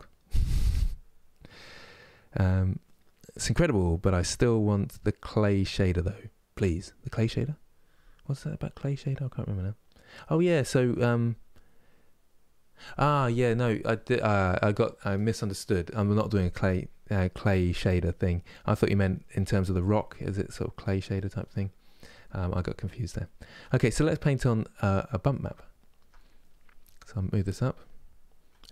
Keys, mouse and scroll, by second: 26.1-28.7 drag.